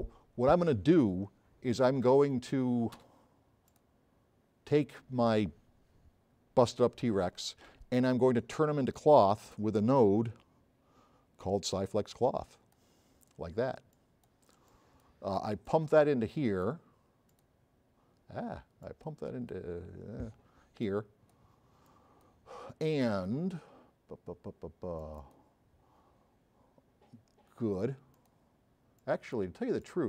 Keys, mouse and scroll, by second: 3.1 space, 11.9 click, 14.0-14.4 drag, 25.0 click, 28.1 click, 28.5 drag.